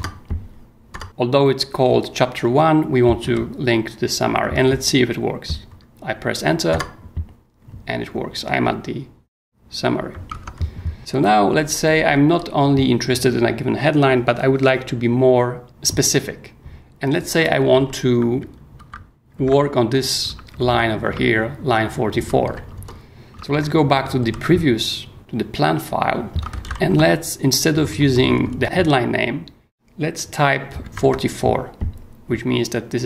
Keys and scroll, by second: 3.2 h, 6.7 Return, 10.3 Tab, 11.5 j, 17.2-20.5 typing, 22.2 j, 22.4 k, 22.7 Escape, 23.3 ctrl+Escape, 23.5 ctrl+o, 24.2 ctrl+j, 25.0 j, 26.5 ctrl+c, 26.6 ctrl+l, 27.7 ctrl+BackSpace, 30.8 4.